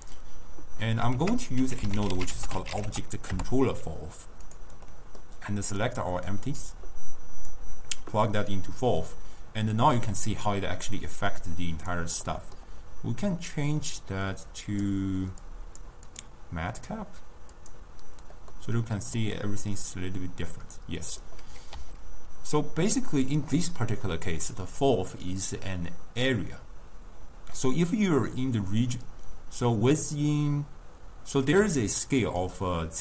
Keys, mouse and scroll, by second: 1.2 ctrl+a, 4.9-5.9 middle drag, 5.9-9.1 drag, 9.1-10.2 middle drag, 10.2 s, 12.3-14.7 middle drag, 14.7-17.8 drag, 19.4-21.8 middle drag, 21.8 s, 25.5-28.5 drag, 31.7 s.